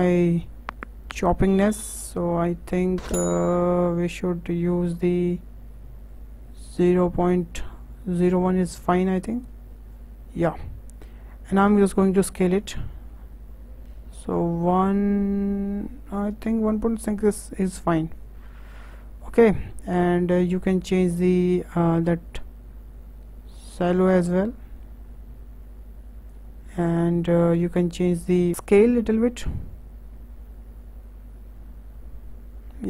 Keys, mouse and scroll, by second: 0.8-3.9 drag, 12.0-15.1 drag, 21.1-24.1 drag.